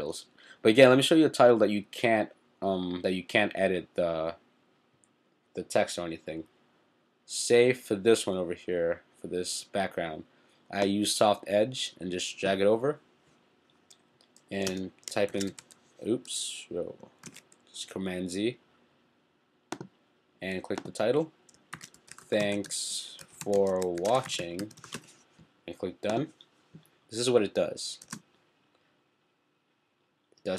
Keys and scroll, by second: 15.3 shift+t, 17.4 super+z, 21.5-25.4 typing.